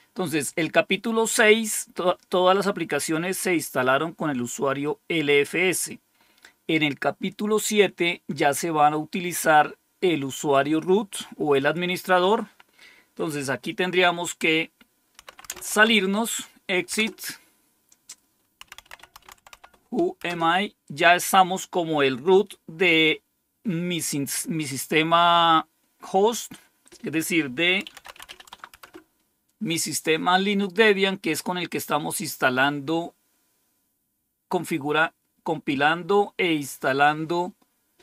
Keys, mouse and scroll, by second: 4.7-5.8 drag, 11.5 click, 14.9-16.2 typing, 16.9 Return, 18.5-20.0 typing, 20.2 Return, 27.5-28.7 typing.